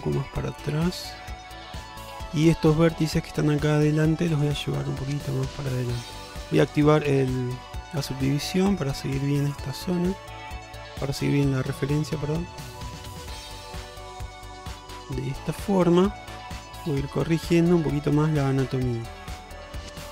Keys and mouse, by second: 1.6 shift+middle click, 2.6 alt+z, 4.2 click, 5.0 click, 6.4 click, 6.9 shift+middle click, 8.0 click, 9.0 click, 10.2 click, 10.8 shift+middle click, 11.4 click, 12.1 click, 13.2 shift+middle click, 13.7 click, 14.6 click, 15.4 shift+middle click, 16.1 shift+middle click, 16.7 click, 17.5 click, 18.0 shift+middle click, 18.5 click, 19.7 click.